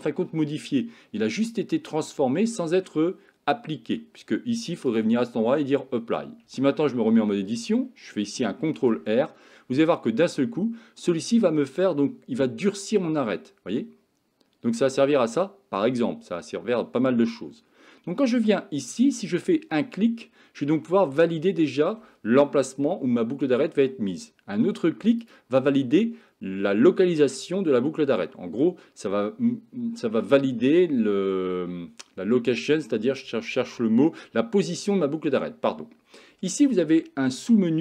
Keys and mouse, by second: 5.0-6.1 drag, 6.5 Tab, 8.7 ctrl+r.